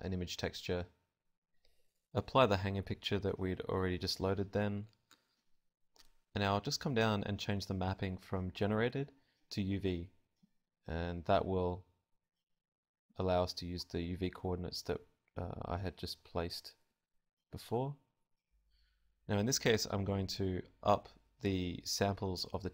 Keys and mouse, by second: 0.6-5.2 drag, 6.1-15.2 drag, 17.1-22.7 drag.